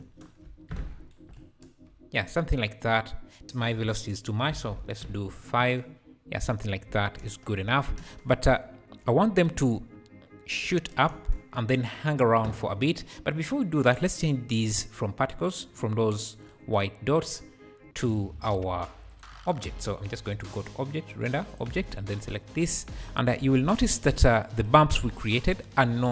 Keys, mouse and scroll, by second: 0.0 space, 0.7 Escape, 0.8-1.1 scroll down 6, 1.4 space, 3.5-5.6 drag, 5.6 space, 6.9 scroll up 3, 7.2 space, 7.9 space, 8.7-9.4 scroll up 1, 9.4-11.1 shift+right drag, 11.1 space, 11.6 space, 13.1-13.7 scroll down 3, 18.0-19.5 drag, 19.5-21.5 scroll down 5, 21.5 click, 22.3 click, 23.0-23.4 scroll up 3, 23.4 alt+a, 23.7 `, 25.3 scroll down 3.